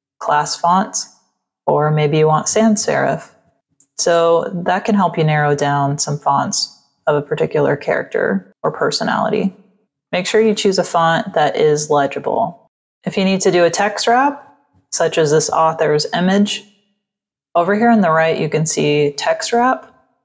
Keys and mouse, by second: 10.0 click, 11.4 z, 12.0 click, 14.2 click, 18.7 click.